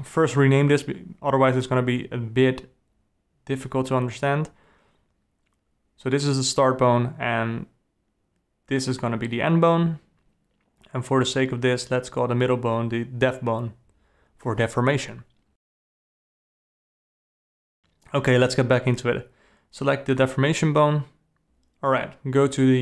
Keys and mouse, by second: 1.2-6.6 drag, 7.3 click, 9.8 click, 10.3-12.6 drag, 13.3 click, 14.2 click, 14.5-18.0 drag, 16.5 BackSpace, 18.5 alt+a, 19.3 click, 19.7 g, 20.6 g, 22.2 r.